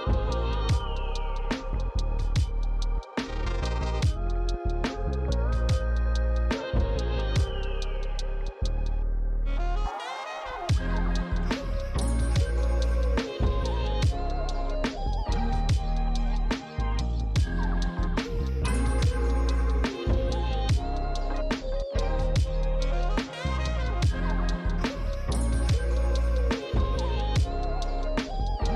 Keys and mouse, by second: 0.5 click, 3.7 click, 5.3-8.0 typing, 6.6 click, 6.7 click, 7.1 click, 8.1 click, 9.6 f, 9.7 click, 11.1 f, 11.2 click, 11.6 f, 11.7 click, 13.8 click, 14.8 click, 15.2 f, 15.3 click, 15.5 f, 16.1 f, 16.4 click, 17.2 ctrl+z, 18.1 click, 20.0 ctrl+z, 20.1 click, 20.2 click, 21.9 click, 26.5 click, 26.8 click.